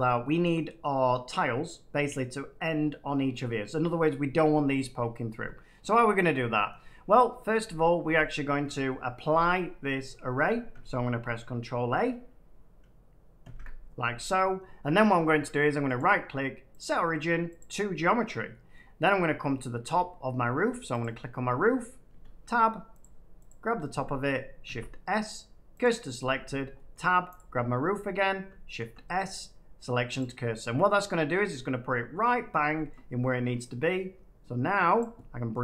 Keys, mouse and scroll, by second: 10.7 shift+middle click, 13.4 ctrl+a, 15.9 right click, 16.8 click, 17.5 click, 18.7 middle click, 19.4 Tab, 20.5 Tab, 20.9 click, 22.0 Tab, 23.0 click, 23.4 click, 24.6 s, 25.7 click, 26.3 Tab, 26.9 scroll, 27.3 click, 28.4 click, 28.7 s, 29.3 click, 30.1 click, 31.3 middle click, 32.8 shift+middle click, 34.9 click.